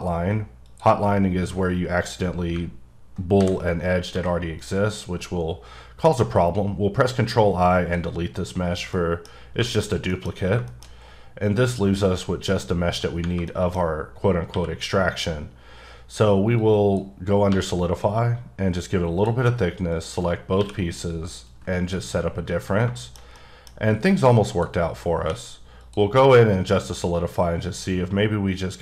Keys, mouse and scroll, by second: 0.6 click, 2.5 click, 3.4 ctrl+i, 4.1 x, 7.7 x, 8.5-8.9 scroll down 3, 8.9 middle click, 10.3-11.6 scroll up 3, 10.7 shift+middle click, 11.6-12.6 scroll down 3, 12.6-13.2 scroll up 1, 13.5 middle click, 14.5 q, 16.6 click, 17.5 2, 19.2 click, 20.5 q, 21.4 click, 22.4-23.0 scroll down 2, 23.0 shift+middle click, 23.6-25.2 typing, 23.9-24.5 scroll up 1, 24.5 click, 25.8 click.